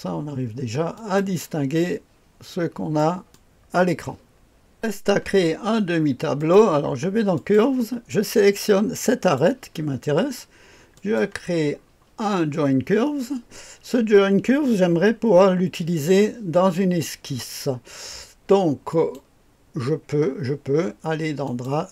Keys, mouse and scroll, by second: 0.9-4.4 drag, 6.4 click, 7.3 click, 7.7 click, 9.2 click, 10.9 click, 11.8-18.9 scroll down 2, 18.9 click, 21.4 click.